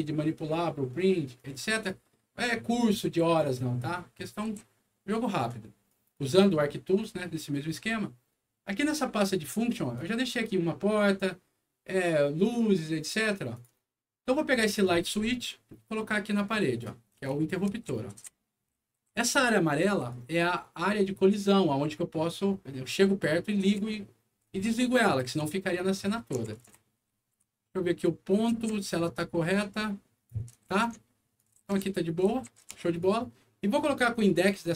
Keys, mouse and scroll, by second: 1.3 right click, 1.5 d, 4.2-5.4 right drag, 4.6 s, 5.8 right click, 7.3 right click, 9.3 click, 9.9 click, 13.5 click, 14.8-16.8 drag, 17.0-19.4 typing, 17.1-19.1 right drag, 19.7 right click, 23.0-25.3 right drag, 23.8-27.3 typing, 26.0-28.0 right drag, 28.5 e, 29.1-30.2 drag, 30.6 ctrl+z, 31.2-32.6 typing, 31.3-33.0 ctrl+right drag, 34.2 click.